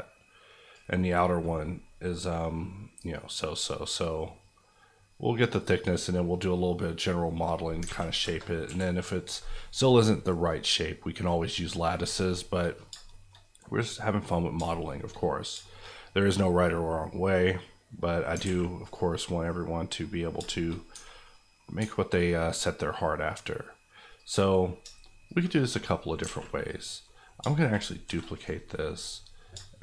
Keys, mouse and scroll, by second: 2.0 middle click, 3.5-5.7 drag, 7.5-7.8 scroll down 2, 7.8 alt+a, 8.2 KP_0, 8.6 KP_1, 12.0 shift+KP_1, 12.2 shift+middle click, 13.8 click, 14.7-17.3 shift+middle drag, 18.4 alt+a, 18.8 click, 19.2 middle click, 19.6-20.0 scroll up 1, 20.0 middle click, 20.3 scroll down 1, 20.5 shift+middle click, 20.9 Tab, 21.2 middle click, 21.8 Tab, 22.5 middle click, 24.2 click, 25.7 middle click, 26.2 alt+a, 26.7 click, 27.0 middle click, 28.0 shift+d, 28.3 right click, 28.6 middle click.